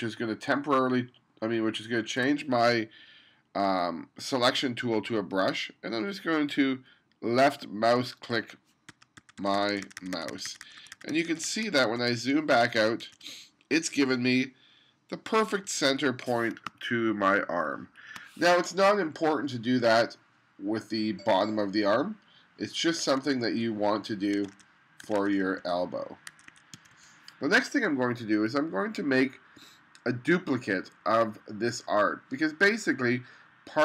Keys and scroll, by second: 9.2 1, 16.7 space, 23.1 2, 24.5 1, 26.4 1, 26.7 2.